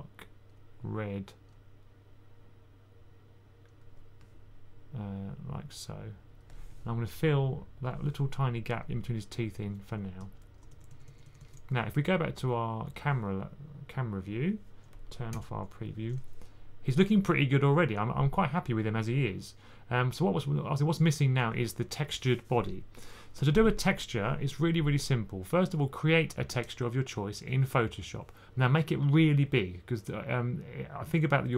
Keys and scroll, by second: 10.3-11.3 typing, 14.0 typing, 15.2 k.